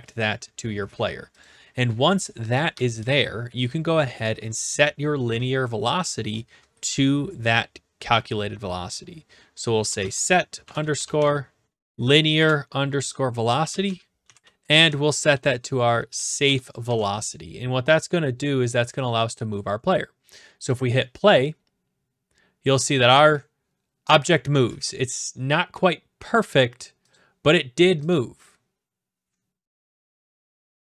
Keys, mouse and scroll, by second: 1.4 click, 4.3 Return, 9.5-12.3 typing, 13.4-16.6 typing, 16.8 ctrl+s, 20.8 click, 27.1 click, 28.1 click.